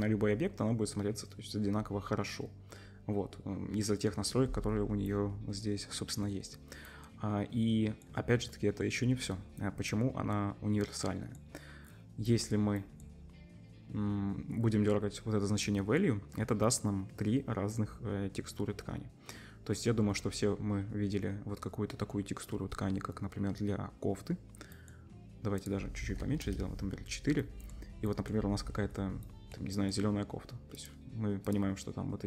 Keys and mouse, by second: 31.5-32.2 drag.